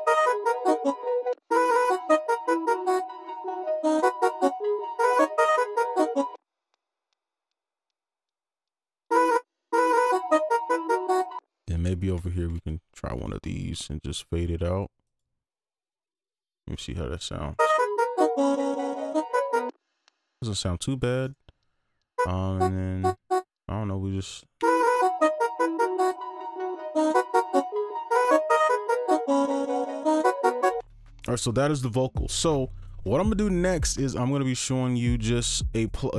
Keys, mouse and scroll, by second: 1.3 space, 1.5 space, 2.2 alt+click, 2.7 right click, 4.1 ctrl+click, 4.4 shift+scroll up 1, 4.6 right click, 6.3 right click, 6.3 space, 6.6 ctrl+click, 7.2-8.2 shift+scroll up 1, 8.2 right click, 9.1 space, 9.3 space, 9.7 space, 10.2 alt+click, 11.2 ctrl+click, 11.3 space, 12.2 ctrl+click, 13.2 shift+right click, 15.0 double click, 16.4-16.7 alt+scroll down 1, 16.7 right click, 17.5 space, 19.6 space, 19.8 right click, 20.6 alt+click, 21.2 right click, 22.5 double click, 24.6 space, 30.8 space.